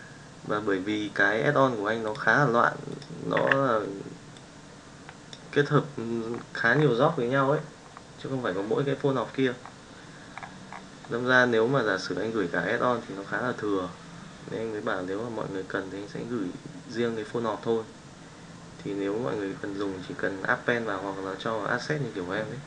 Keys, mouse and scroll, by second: 3.3 n, 4.3-5.4 drag.